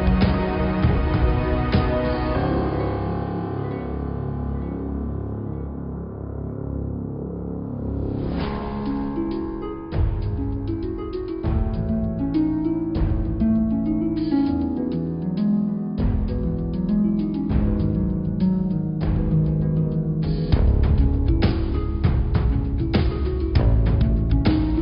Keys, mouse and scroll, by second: 0.0-1.9 drag, 2.0 Tab, 2.7-3.0 scroll down 2, 4.0 click, 6.2 click, 7.2 click, 14.7-16.9 scroll down 4, 17.7-18.0 scroll down 5, 18.0-18.6 scroll up 4, 18.6 click, 19.1-20.3 middle drag, 20.3 click, 21.1 shift+a, 22.5 click, 23.1-24.2 middle drag, 24.2 click.